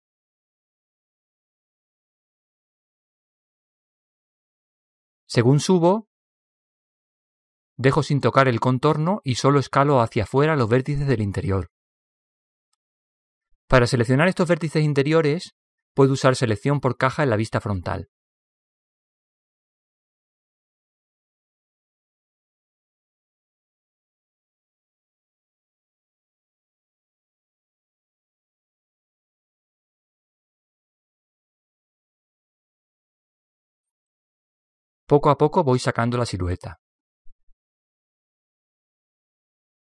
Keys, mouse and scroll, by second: 0.0 s, 3.6 middle click, 4.1 middle click, 4.1 a, 8.4 middle click, 11.9 b, 12.8 KP_3, 15.2 s, 19.6-22.9 middle drag, 23.0 a, 23.4-25.2 middle drag, 25.7 b, 28.4 KP_3, 30.2 s, 33.9-36.3 middle drag, 37.3 a, 38.9 b.